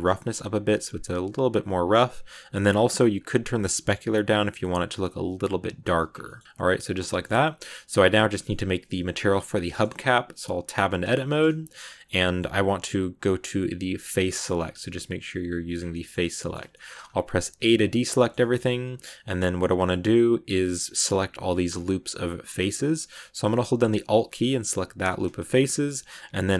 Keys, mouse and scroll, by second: 2.8-4.7 drag, 5.0 click, 6.0 scroll down 2, 6.1 middle click, 6.4 scroll up 1, 6.4 middle click, 6.9-8.4 scroll up 3, 7.0 shift+middle click, 8.4 scroll up 1, 8.4-9.9 middle drag, 9.9-10.5 scroll up 1, 10.5 Tab, 11.0-14.0 shift+middle drag, 14.0 click, 15.6 scroll down 2, 15.8-16.9 middle drag, 16.9-17.5 scroll up 1, 17.5 a, 17.8-19.6 middle drag, 19.6-20.3 scroll up 1, 20.3-23.4 scroll up 1, 24.9 alt+right click, 25.3 scroll down 1, 25.4 shift+middle click, 26.0-26.5 scroll up 1.